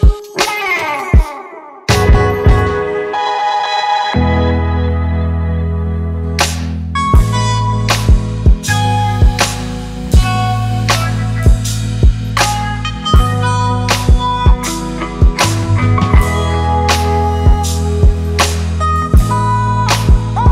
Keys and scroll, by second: 4.0 ctrl+space.